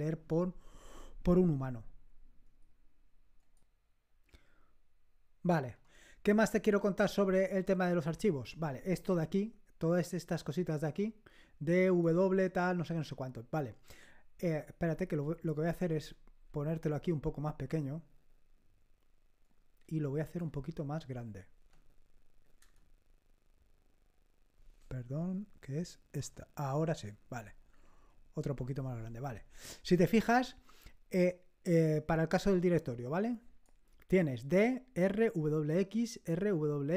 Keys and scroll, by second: 15.9 super+Right, 22.6 ctrl++, 26.2 ctrl++, 28.0 ctrl++.